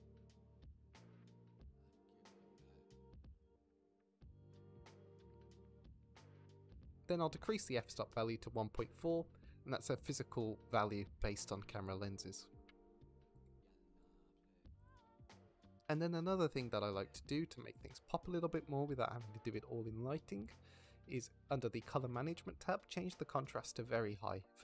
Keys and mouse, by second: 0.5 click, 2.4-2.8 drag, 4.2 click, 4.6 click, 5.4 g, 7.3 Escape, 8.1 click, 9.0 click, 9.5-10.4 middle drag, 11.6 shift+drag, 12.9-14.5 middle drag, 15.4 middle click, 17.3-19.1 middle drag, 19.9-21.9 middle drag, 23.6 middle click.